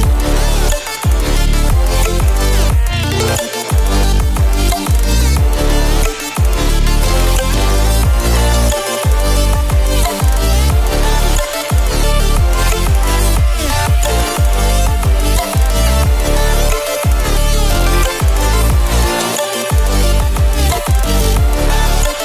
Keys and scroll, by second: 3.2 ctrl+space, 3.7 ctrl+space, 12.9 ctrl+space, 14.0 ctrl+space, 14.8 [, 15.3 ctrl+space, 15.4 ctrl+space, 15.8 ctrl+space, 18.4 ctrl+space, 19.5 ], 20.2 ctrl+space, 20.3 ctrl+space, 20.6 ctrl+space, 22.0 ctrl+space.